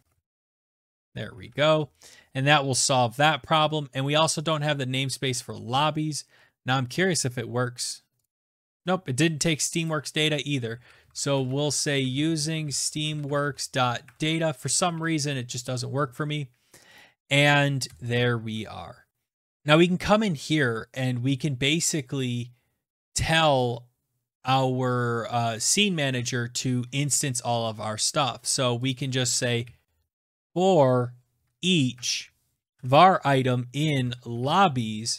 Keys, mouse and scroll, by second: 0.0-1.5 typing, 4.5 click, 5.8 click, 7.1 click, 8.2 click, 10.2 Return, 10.5-14.6 typing, 14.9 ctrl+s, 16.9 click, 17.8 Return, 19.3 Up, 19.3 click, 19.6 Tab, 19.6 click, 23.3 scroll, 25.5 click, 26.5-27.9 scroll, 28.8 click, 29.6-30.6 typing, 31.2 Down, 31.4 Down, 31.5 Down, 31.8 Tab, 32.6 Tab, 32.8 Tab, 33.2 click, 33.4-34.8 typing, 35.1 Down.